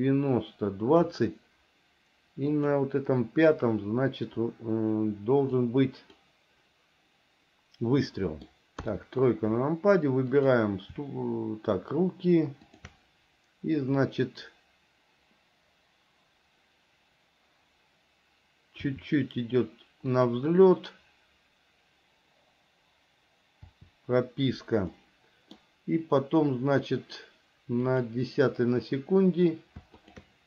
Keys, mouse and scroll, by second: 2.8 click, 5.7 click, 8.3 middle click, 9.0 KP_3, 10.6 click, 12.9 shift+click, 19.1 r, 25.1 middle click, 28.1 click.